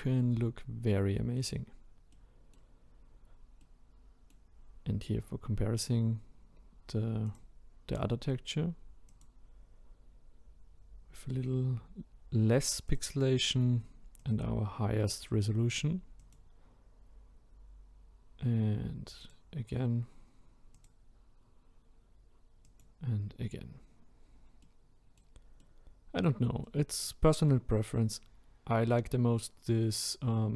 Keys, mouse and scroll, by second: 1.4 click, 2.1-3.1 middle drag, 3.1-3.6 scroll down 1, 3.6-9.2 middle drag, 9.2 click, 10.1-11.2 scroll up 2, 11.2-12.9 scroll down 1, 12.9-14.3 scroll down 1, 14.3-19.3 drag, 21.4-24.7 drag, 24.7-30.5 middle drag.